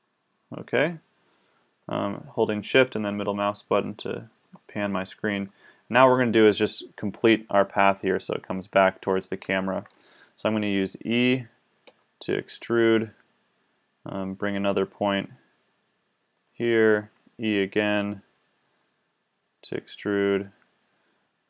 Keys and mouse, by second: 11.9 e, 16.8 e.